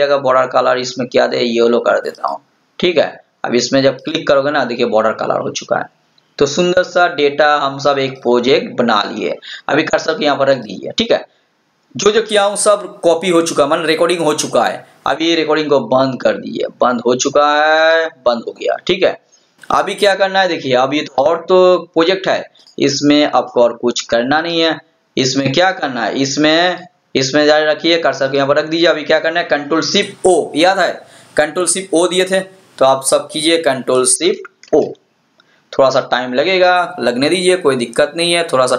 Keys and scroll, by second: 34.8 ctrl+shift+o.